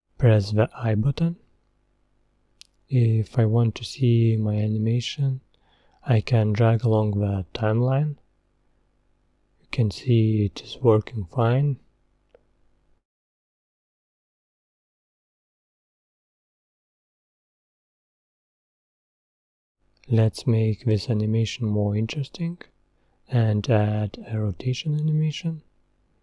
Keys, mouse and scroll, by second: 4.8-8.1 drag, 8.7-9.0 scroll down 1, 9.2-9.7 scroll up 2, 9.8 scroll down 2, 10.5 scroll up 1, 11.8-14.8 scroll down 1, 20.4 click, 21.8-22.2 scroll down 1, 23.3-25.2 scroll up 1, 25.2 click.